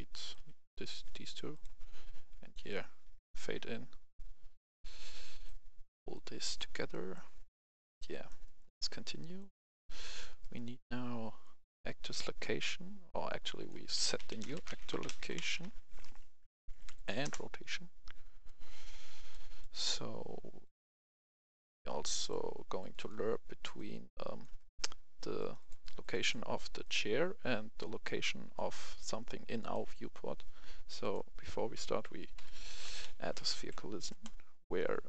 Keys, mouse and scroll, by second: 0.2 click, 0.3 Delete, 1.5-6.1 drag, 6.9 right click, 9.4 click, 9.7 right click, 11.4-14.0 drag, 14.0-15.6 typing, 16.4 Down, 16.6 Down, 16.7 Down, 17.2 Return, 18.4-21.4 drag, 21.4 right click, 22.8 click, 24.5 right click, 25.3 click, 28.5 right click, 29.6 click, 32.0-33.6 typing, 34.1 Return.